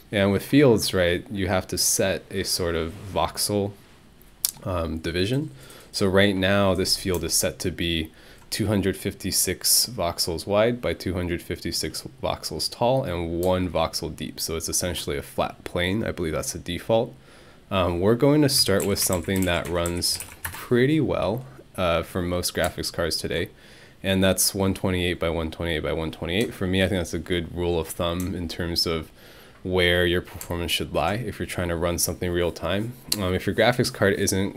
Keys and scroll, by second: 18.3-20.7 typing.